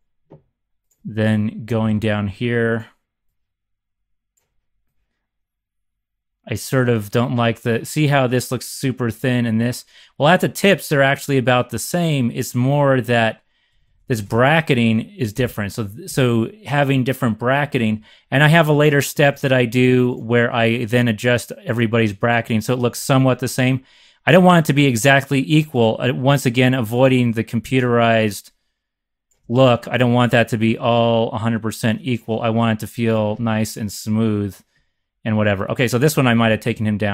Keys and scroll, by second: 1.6 Right, 1.7 Right, 1.8 Right, 13.6 Up, 13.8 Up, 14.0 Up, 14.1 Up, 14.2 Up, 15.3 Up, 15.4 Up, 16.0 Down, 19.3 z, 36.4 c, 36.8 c, 36.9 c, 37.0 Up, 37.0 c.